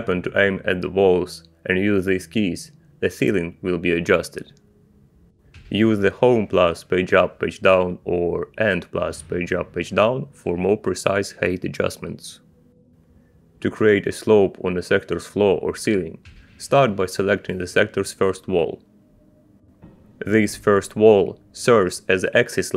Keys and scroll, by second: 3.5 Page_Up, 7.5 Home, 7.9 Page_Up, 8.6 Page_Down, 9.4 End, 9.9 Page_Up, 10.7 Page_Down.